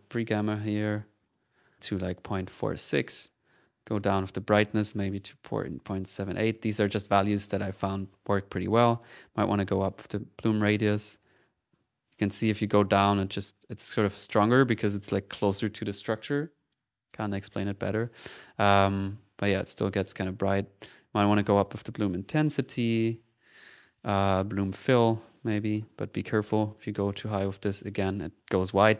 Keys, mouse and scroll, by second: 1.5 typing, 1.9 click, 4.2 click, 7.2 click, 9.2-14.1 drag, 13.5 typing, 14.6 click, 14.6 typing, 19.1 1, 20.3 click, 21.3 click, 23.9-25.4 drag, 25.2 typing, 26.7-27.9 drag, 28.3 ctrl+z.